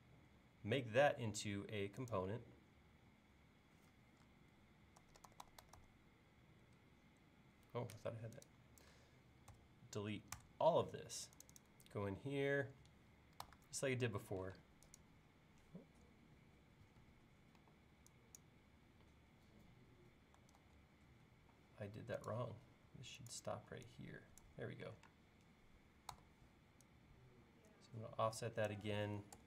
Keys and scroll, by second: 5.0-5.8 typing, 10.4 BackSpace, 13.4 f, 14.5 space, 17.6 e, 20.6 super+z, 23.5 e, 25.1 space, 26.2 f, 29.1 2, 29.3 Return.